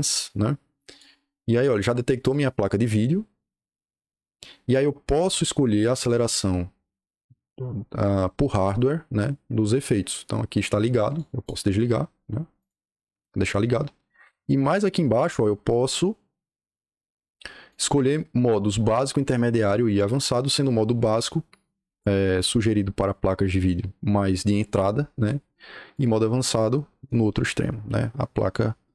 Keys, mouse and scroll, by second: 0.0-0.9 drag, 11.0 click, 12.5 click, 17.6 click, 20.9 click, 25.1 click, 25.8 click.